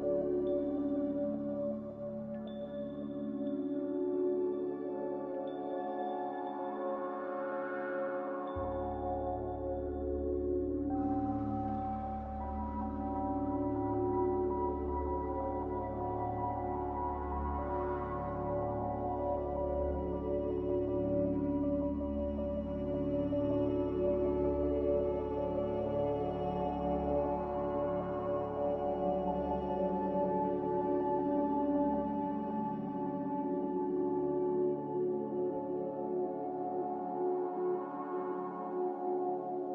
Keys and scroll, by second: 4.7 a, 13.0 ctrl+z, 29.5 s.